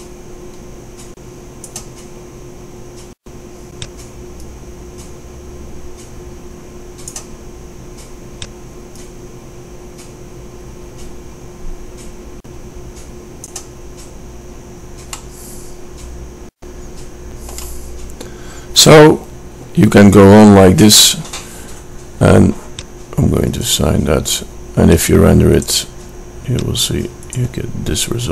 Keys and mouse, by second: 4.9-6.0 drag, 9.5-10.6 drag, 15.4 middle click, 16.4-23.8 middle drag.